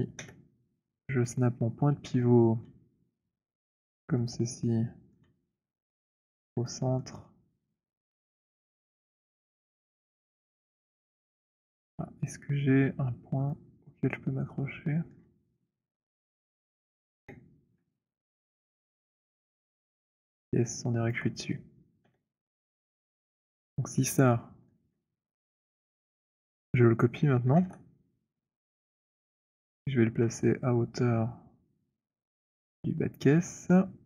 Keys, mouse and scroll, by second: 0.1 Insert, 2.8-4.1 c, 4.9-5.3 c, 5.3 middle click, 5.5-6.4 scroll, 6.4-7.1 scroll, 7.1-7.9 alt+middle click, 8.3 alt+right click, 9.4-15.3 typing, 12.1 middle click, 15.3 middle click, 17.3 f, 21.1 alt+click, 22.2 Insert, 22.9-23.9 scroll, 24.9 alt+middle click, 27.7 ctrl+d, 30.4-32.9 typing, 32.9 click, 33.4-33.7 scroll.